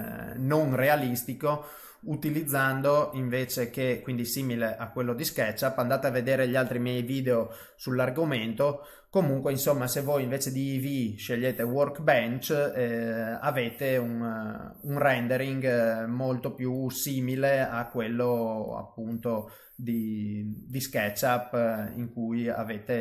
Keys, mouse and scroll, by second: 2.2 click, 3.2 click, 4.5 middle click, 5.2 click, 6.1 click, 7.9-9.1 scroll up 7, 9.8 click, 10.4 click, 14.2 middle click, 17.0 click, 18.6 click, 21.0 click.